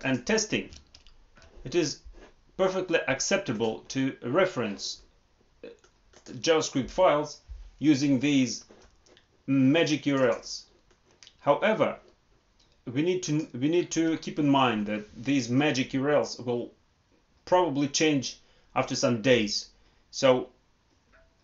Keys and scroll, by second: 0.7 alt+Tab.